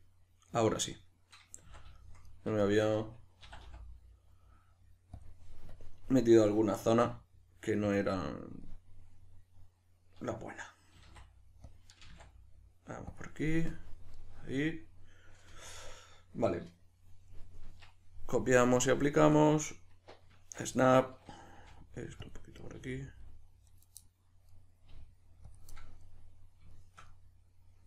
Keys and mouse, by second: 1.6 z, 3.4 e, 5.2 click, 6.1 middle click, 6.8 s, 7.9 click, 8.0 middle click, 11.0 s, 11.7 click, 12.0 g, 13.2 click, 14.1-18.3 middle drag, 17.7 Tab, 18.3-20.7 drag, 19.1 Tab, 20.7 right click, 21.6 g, 22.3 click, 22.6 right click, 22.7 g, 23.2 click, 23.7 right click, 24.0 middle click, 24.9 g, 25.5 click, 25.7 middle click, 26.7 shift+middle click, 27.1 middle click.